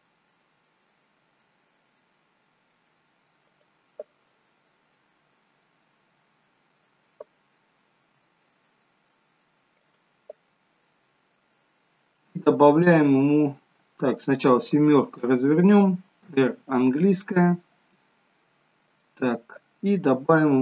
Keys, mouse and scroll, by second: 4.9-5.7 scroll up 4, 5.7-6.2 scroll down 2, 6.4-7.0 scroll down 1, 8.2-8.6 scroll down 1, 8.2 s, 10.4 middle click, 13.1-13.5 scroll up 5, 14.3 scroll down 3, 14.6 KP_7, 16.6 r.